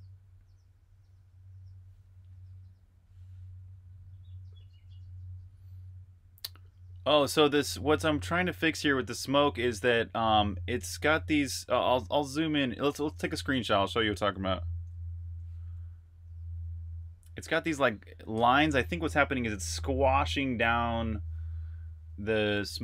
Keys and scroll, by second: 0.0-0.1 typing, 1.6 Return.